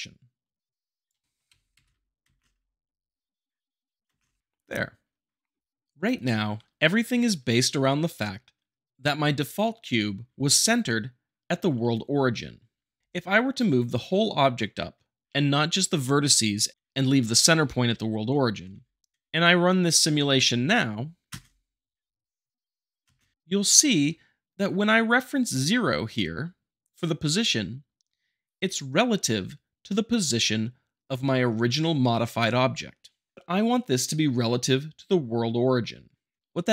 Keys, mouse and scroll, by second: 0.0-1.0 drag, 1.2 shift+middle click, 1.8 shift+Left, 2.2 space, 4.1 space, 4.6 `, 13.0 ctrl+z, 18.6 g, 19.1 click, 21.3 space, 23.1 space.